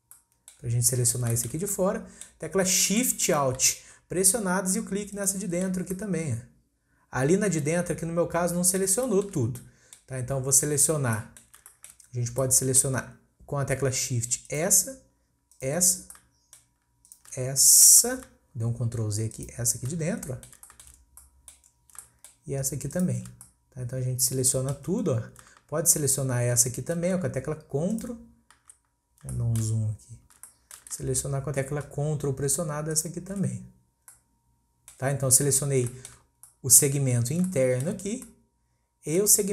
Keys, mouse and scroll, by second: 0.1-2.5 middle drag, 2.5-2.8 scroll up 1, 2.8-5.1 shift+middle drag, 5.1 alt+shift+click, 5.8 scroll down 1, 5.9-8.9 middle drag, 9.1-9.5 shift+middle drag, 9.5 scroll up 1, 9.6-10.2 middle drag, 10.2-10.8 scroll down 1, 10.8-11.2 scroll down 2, 11.2 middle click, 11.6-12.1 scroll up 1, 12.1-12.4 scroll up 3, 12.4-14.4 middle drag, 14.4 shift+click, 15.5 shift+click, 16.2-17.1 shift+middle drag, 17.1 shift+click, 17.8 ctrl+z, 19.3 shift+click, 20.0 scroll down 2, 20.2 middle click, 21.0 scroll up 1, 21.2-21.7 middle drag, 21.7 scroll up 1, 22.0-23.0 shift+middle drag, 23.0 shift+click, 23.4-25.1 middle drag, 25.1-25.5 scroll up 1, 27.9 ctrl+click, 29.0-29.3 scroll up 1, 29.3-29.8 shift+middle drag, 29.8-30.5 scroll up 1, 30.5-32.3 shift+middle drag, 32.9 ctrl+click, 33.6-34.1 scroll down 1, 34.1-35.3 middle drag, 35.3-35.8 scroll down 2, 35.8-38.1 shift+middle drag, 38.1 scroll up 1, 38.3-39.5 middle drag.